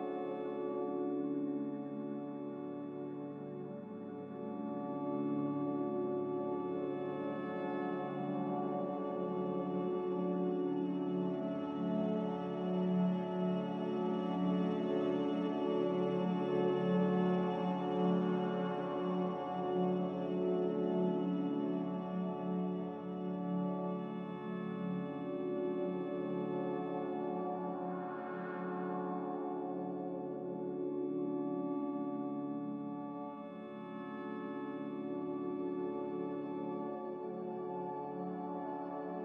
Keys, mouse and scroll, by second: 7.8 z, 33.9 Escape, 34.4 ctrl+z, 34.6 ctrl+z.